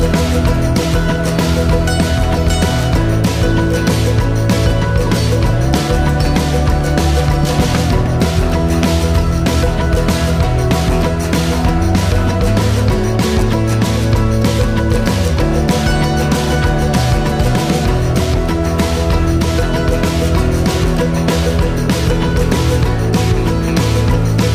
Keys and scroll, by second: 11.7-12.2 typing, 12.5 Return, 14.6 typing, 15.0 Return, 16.2 typing.